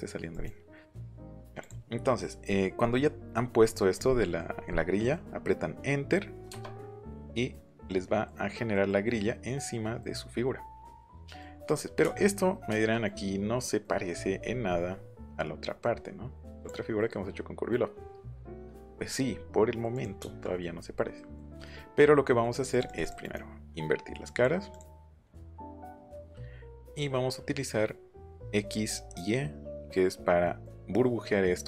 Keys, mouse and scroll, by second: 0.2 click, 1.6 click, 3.3 middle click, 4.1 middle click, 4.6 middle click, 4.9 middle click, 6.5 Return, 16.6 click, 18.3 scroll up 2, 19.9 click, 22.7 click, 23.0 click, 23.2 right click, 24.2 click, 24.7 click, 25.2 click, 25.5 middle click, 25.9 click, 26.2 middle click, 30.4 middle click.